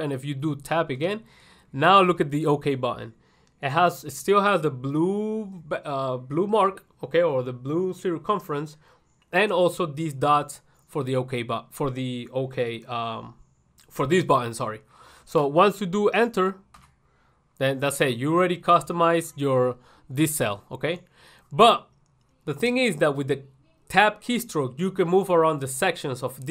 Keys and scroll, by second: 16.9 ctrl+1.